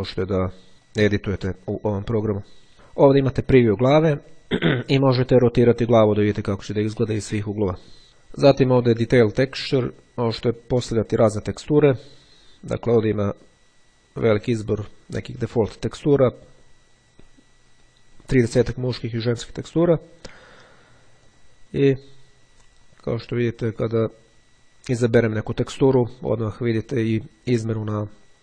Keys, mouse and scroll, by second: 0.9-2.7 drag, 5.5 click, 10.1 click, 11.9-12.8 scroll down 1, 13.6-14.4 scroll down 2, 15.5-16.5 scroll down 2, 16.5-18.5 scroll up 2, 20.1-20.9 scroll down 2, 21.3 click.